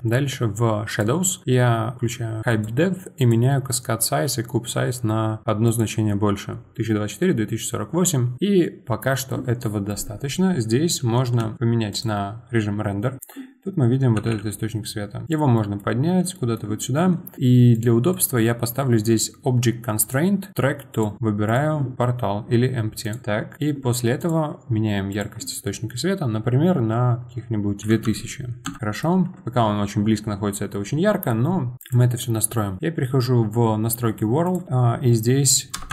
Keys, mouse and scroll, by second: 12.2 z, 14.2 g, 17.7 click, 18.1 click, 20.0-21.5 drag, 23.1 click, 23.2-23.5 scroll down 2, 23.5 middle click, 24.2 click, 25.1-27.8 drag, 28.0 KP_0, 28.8-31.7 middle drag, 31.8 click, 34.4-35.9 drag.